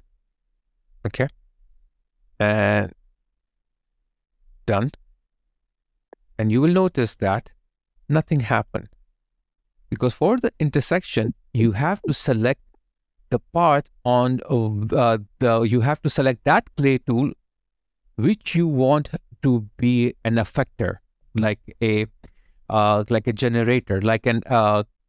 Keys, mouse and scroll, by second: 5.9 double click, 10.5 double click, 11.1 ctrl+z, 21.5 alt+right click, 22.4 alt+click, 23.8 alt+right click.